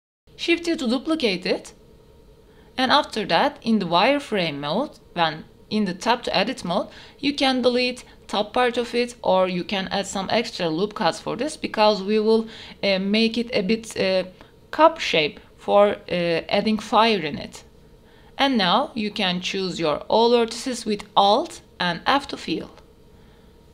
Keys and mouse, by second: 0.0 shift+d, 0.2 x, 1.9 KP_1, 3.6 click, 4.7 shift+click, 5.0 Tab, 5.6 1, 6.1 click, 7.9 ctrl+r, 9.7-10.7 drag, 11.4 x, 12.1 Tab, 12.3-12.7 drag, 12.9 shift+drag, 13.8 click, 15.5 shift+middle drag, 16.3 middle click, 17.0 Tab, 17.7 alt+click, 18.2 middle click, 19.4 f, 19.8 middle click, 20.6 middle click, 21.6 middle click, 22.8 ctrl+r.